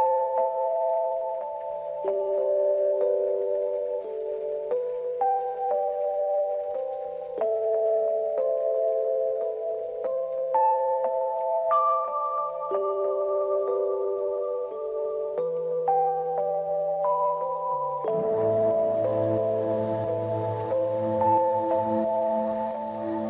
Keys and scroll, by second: 0.9 ctrl+=, 1.3 ctrl+-, 1.5 ctrl+=.